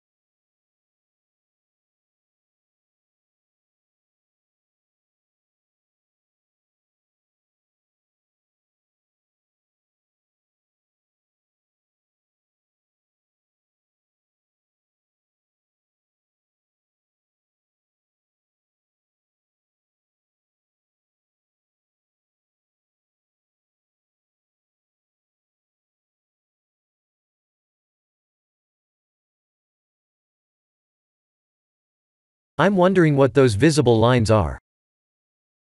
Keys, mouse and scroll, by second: 0.1 e, 1.1 ctrl+z, 1.5 click, 2.3 shift+click, 3.0 e, 4.9 KP_0, 6.5-8.0 scroll up 5, 8.0-9.1 scroll up 1, 9.4 shift+`, 15.8 click, 16.6 click, 27.2 click, 28.3 1, 28.7 1, 30.9 click.